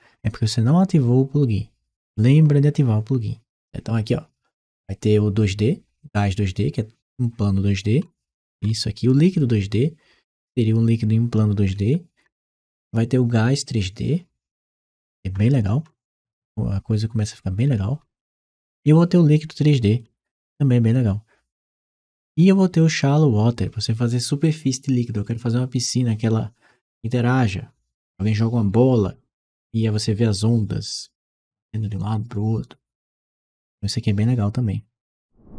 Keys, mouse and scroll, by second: 7.8-8.8 scroll down 1, 11.5-12.3 scroll down 1, 12.6-13.0 scroll down 1, 15.2-16.1 scroll down 1, 17.5-18.8 scroll down 1, 19.9-20.4 scroll down 1, 21.6-22.3 scroll down 1, 22.3 scroll down 1.